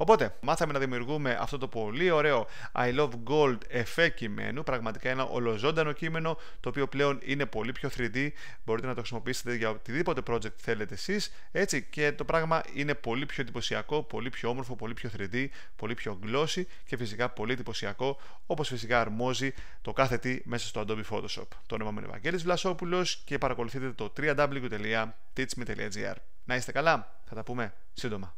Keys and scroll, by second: 0.3 f.